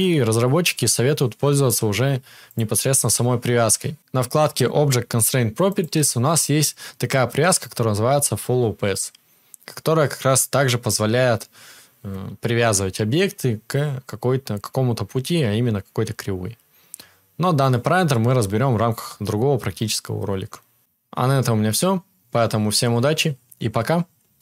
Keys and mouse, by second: 0.6-2.6 drag, 0.6-2.6 middle drag, 0.6-24.4 right drag, 5.7-22.6 drag, 5.7-22.6 middle drag.